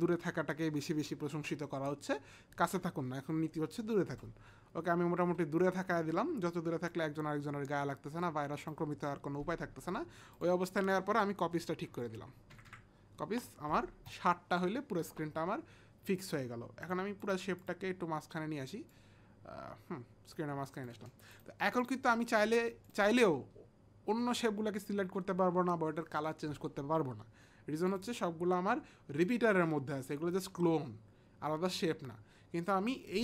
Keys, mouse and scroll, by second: 6.8 click, 10.4 click, 11.5 Down, 11.9 Down, 12.6 Up, 14.5 Up, 14.5 Down, 14.5 click, 16.8 click, 17.3 click, 18.3 click, 18.9 click, 21.3 click, 22.8 click, 27.9 click.